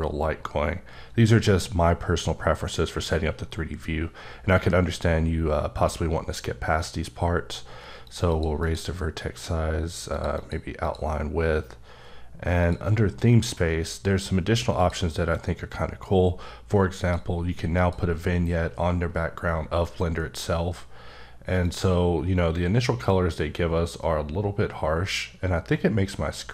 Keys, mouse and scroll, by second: 0.3-0.8 scroll down 3, 0.8-1.4 scroll up 1, 1.4-1.9 scroll up 3, 1.9-5.6 scroll down 12, 8.1 click, 8.3 double click, 8.6 click, 10.1 click, 10.3 double click, 10.8 click, 12.6 click, 13.1-14.8 scroll down 5, 14.8 click, 17.0 click, 17.8 click, 21.6 click, 23.1 click.